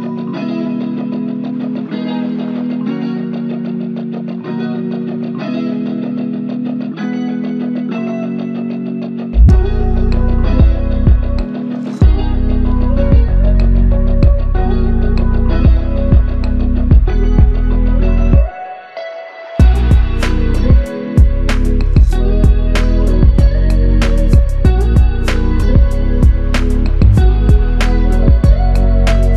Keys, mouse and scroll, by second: 0.2 double click, 10.1 double click, 17.0 double click, 25.5 double click.